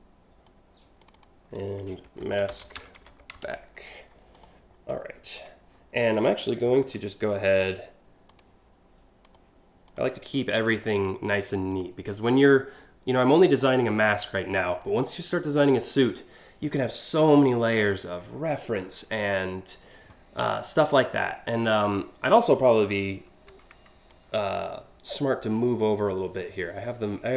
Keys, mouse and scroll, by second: 0.6 click, 0.7 click, 1.6-3.5 typing, 4.0 click, 5.0 click, 7.2 click, 7.9 click, 8.8 click, 9.5 click, 10.3 click, 11.3 click, 11.9 click, 23.7-27.3 shift+drag.